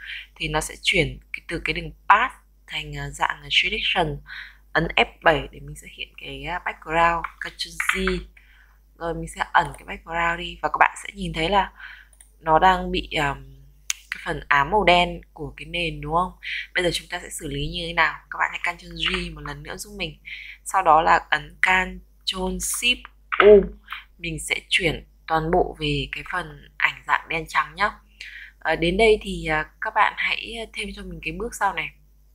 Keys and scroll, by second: 0.0 ctrl+Return, 8.7 ctrl+j, 20.0 ctrl+j, 22.3 ctrl+shift+u.